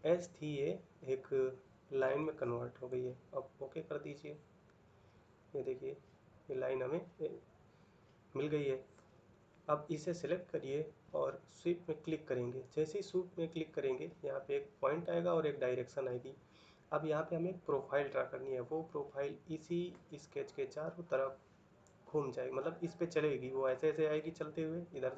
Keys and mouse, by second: 4.4 middle click, 13.1 middle click.